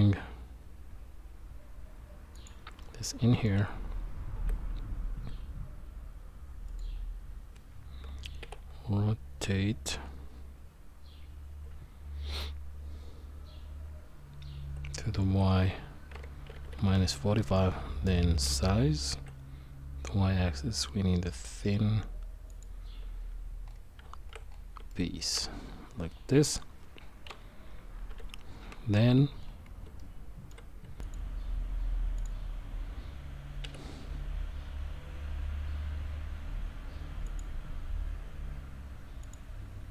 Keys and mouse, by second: 2.8 middle click, 4.3 s, 8.4 r, 34.2 q.